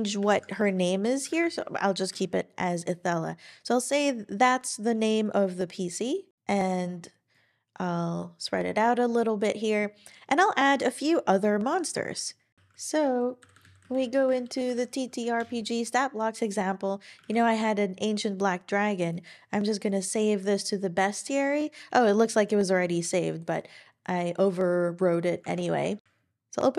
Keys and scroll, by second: 0.1-1.7 typing, 12.5 super+t, 12.5 super+o, 13.1-15.2 typing, 15.3 Return, 17.2 super+e, 25.5 super+w.